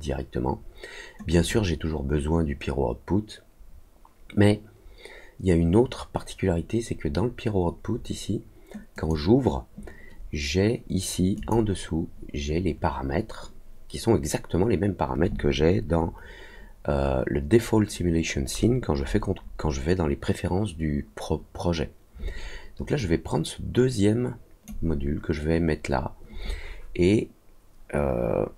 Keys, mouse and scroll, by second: 1.2-9.0 drag, 11.3 click, 22.9-24.6 drag.